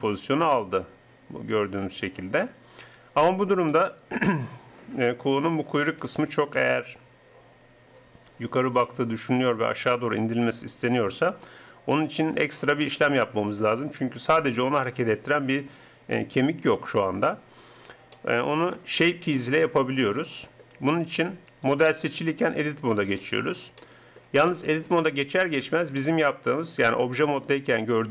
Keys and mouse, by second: 2.8 KP_3, 22.0 Tab, 25.9 Tab, 27.8 middle click.